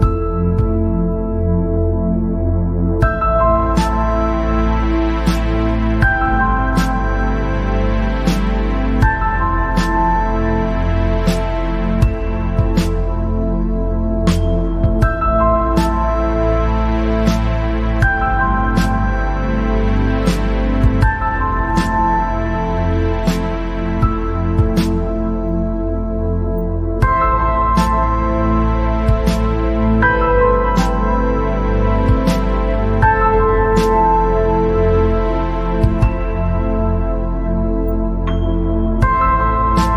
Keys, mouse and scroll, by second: 2.0 click, 2.7 scroll down 1, 2.8-4.0 middle drag, 4.0 scroll up 3, 4.4-7.5 middle drag, 7.6-8.1 scroll down 5, 8.1 scroll up 4, 9.1-10.4 drag, 10.9 scroll down 1, 11.1-12.1 middle drag, 12.1-12.5 scroll up 1, 12.5-14.8 middle drag, 14.8-16.5 scroll up 2, 16.5-16.9 scroll up 1, 16.9-17.8 scroll down 3, 18.4 scroll up 3, 19.1-20.3 middle drag, 20.3-20.7 scroll down 2, 21.0 scroll up 1, 21.4 scroll down 1, 21.5 middle click, 22.1-22.7 scroll up 4, 22.7 scroll down 1, 22.8-25.9 middle drag, 27.5 scroll up 3, 28.0 scroll down 2, 28.2-30.4 middle drag, 30.4-33.6 drag, 34.3 click, 34.8 scroll down 1, 34.9 middle click, 35.6 scroll up 2, 35.8 scroll down 1, 35.9-38.2 middle drag, 38.2-38.6 scroll down 4, 38.6 middle click, 39.4 scroll down 1, 39.6 middle click.